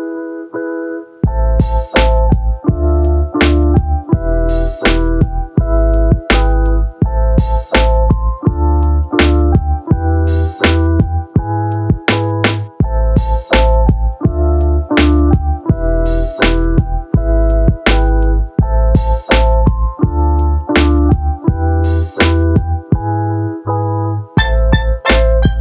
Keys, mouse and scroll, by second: 3.2 click, 3.7 ctrl+shift+click, 5.7-8.4 drag, 9.4 click, 11.9 click, 12.4 ctrl+shift+click, 13.4 shift+a, 17.4-18.9 drag, 22.5 middle click.